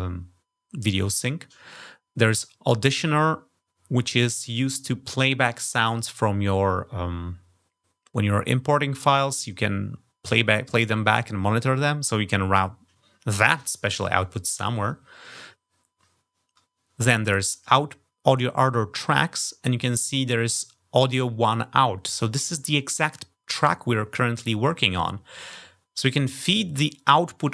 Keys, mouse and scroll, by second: 17.3 click, 27.2 click.